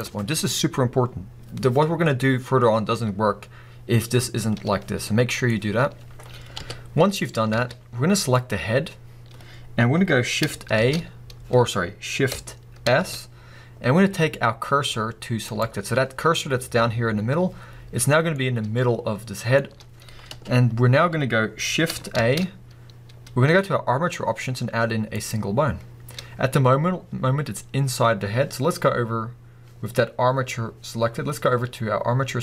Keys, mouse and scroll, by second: 5.0-8.3 middle drag, 6.6 KP_1, 7.5 alt+a, 8.3 click, 10.7 shift+a, 12.8 shift+s, 16.3-18.3 scroll down 2, 18.3-32.4 middle drag, 20.3 KP_1, 21.2-22.1 scroll up 2, 22.1 shift+a, 26.5-30.6 scroll up 2.